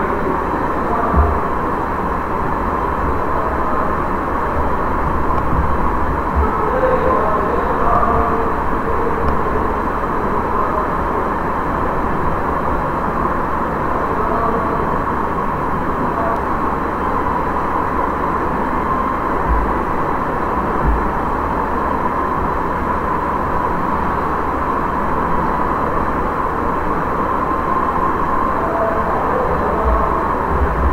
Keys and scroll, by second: 19.4 Delete, 20.7 Delete, 29.8 ctrl+c, 30.2 ctrl+n, 30.5 Return.